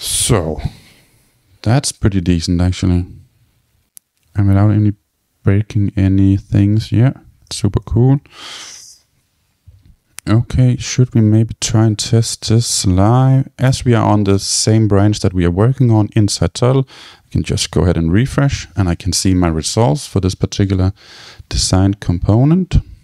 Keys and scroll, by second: 17.6 super+r.